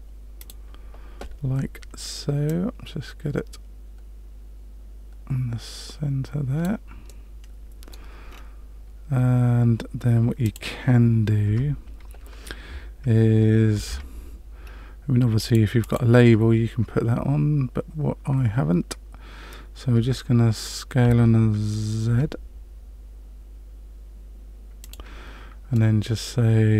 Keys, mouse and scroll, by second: 0.3 click, 2.4 click, 7.0 middle click, 8.3-10.1 scroll down 2, 10.1-10.4 scroll down 1, 10.4 click, 11.4 Tab, 13.7 ctrl+r, 21.0 s, 25.7 middle click.